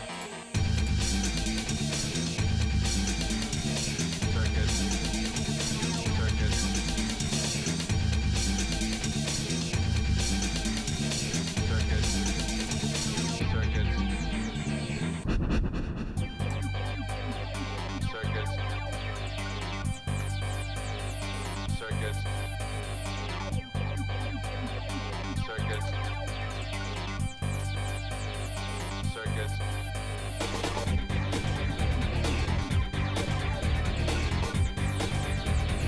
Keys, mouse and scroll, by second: 1.2-3.5 drag, 5.9 click, 7.3-8.9 drag, 9.5 shift+middle click, 10.1 middle click, 11.3 click, 12.7 click, 13.1-18.1 drag, 20.1 g, 26.2 shift+middle click, 26.6 middle click, 27.1 shift+middle click, 27.9 middle click, 32.8-35.8 shift+middle drag.